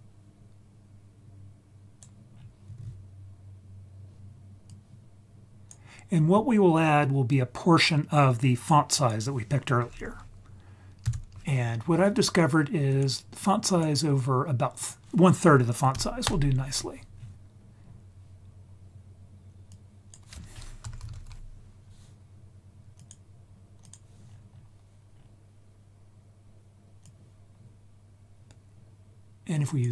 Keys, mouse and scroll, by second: 2.3 scroll down 2, 4.7-5.7 drag, 6.0-7.3 scroll up 4, 7.3 click, 7.7-13.0 drag, 13.7 click, 14.8-16.2 drag, 17.1-17.8 scroll down 3, 19.7-23.1 drag, 19.7 scroll down 1, 23.8 click, 24.2-25.1 scroll up 4, 25.1 scroll down 2, 27.0 click, 27.7-29.8 drag.